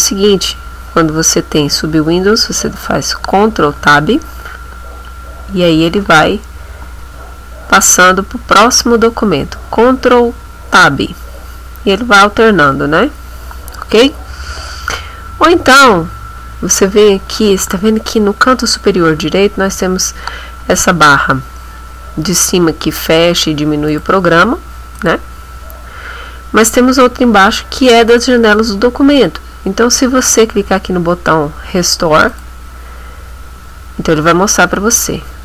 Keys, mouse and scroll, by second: 3.8 ctrl+Tab, 6.9 ctrl+Tab, 9.0 ctrl+Tab, 10.7 ctrl+Tab, 12.5 ctrl+Tab, 23.9 click, 25.0 click, 32.3 click.